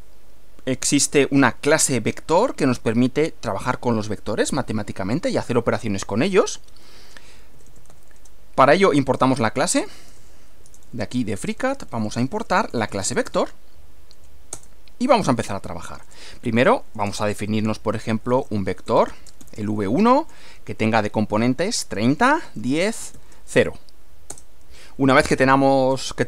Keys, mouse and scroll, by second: 7.3-8.3 typing, 9.4-13.8 typing, 14.5 Return, 16.0 Return, 16.0-23.3 typing, 24.3 Return.